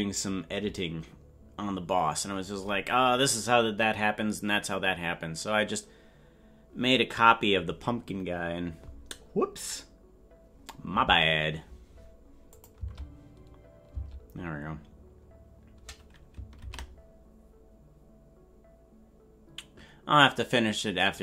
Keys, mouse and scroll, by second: 12.6-14.4 drag, 14.4 space.